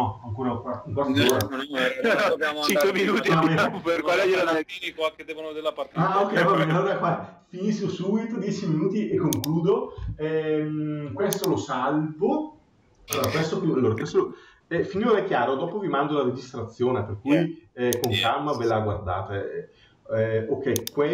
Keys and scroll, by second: 14.7 Delete.